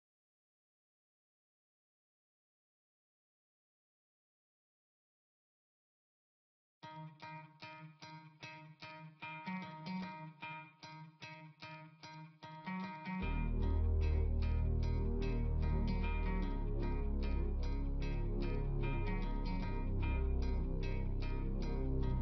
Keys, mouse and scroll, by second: 11.3-12.9 scroll down 1, 12.9 scroll up 1, 18.2 scroll down 1.